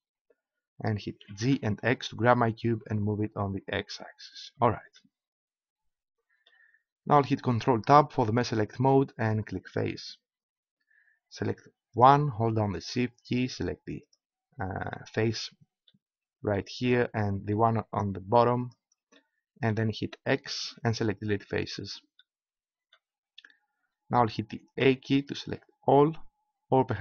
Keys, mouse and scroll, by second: 1.2 g, 4.4-7.7 drag, 8.2 ctrl+Tab, 11.9-16.0 right drag, 18.7-20.5 right drag, 20.5 x, 24.8 a.